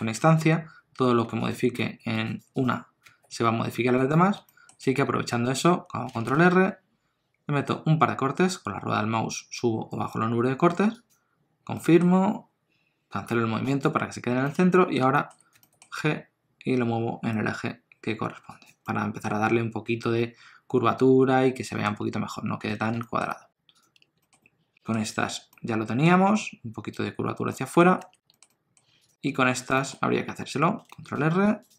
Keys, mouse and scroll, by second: 0.1 Tab, 1.2 1, 1.4 click, 1.8 g, 2.5 click, 3.1 g, 4.4 shift+middle click, 6.1 ctrl+r, 14.4 middle click, 15.1 shift+middle click, 15.5 g, 18.9 middle click, 21.8 Tab, 22.7 alt+a, 22.9 shift+middle click, 23.7 click, 23.9 Tab, 24.2 shift+middle click, 24.4 middle click, 27.9 Tab, 28.3 shift+middle click, 28.5 middle click, 29.0 click, 29.2 Tab, 29.7 shift+middle click, 30.0-30.4 scroll up 1, 30.9 ctrl+r.